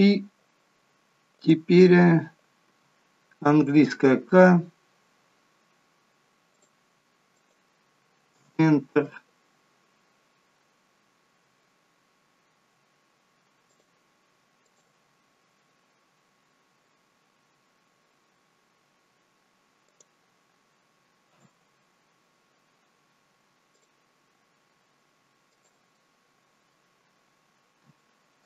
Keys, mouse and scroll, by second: 1.3 click, 2.6 k, 13.1 k, 23.2 k, 25.9 middle click.